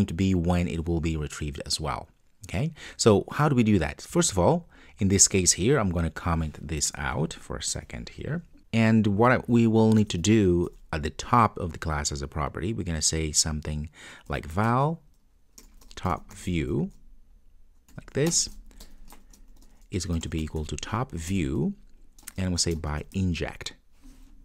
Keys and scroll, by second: 7.7 super+/, 21.3 Return.